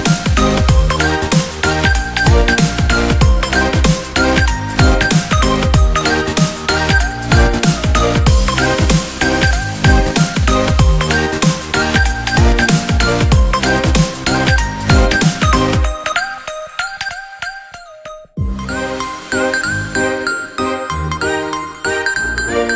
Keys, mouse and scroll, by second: 2.4-6.5 drag, 6.5-9.5 middle drag, 9.5-11.5 drag, 11.5-14.1 middle drag, 14.1 click, 15.9 click, 17.1-19.5 drag.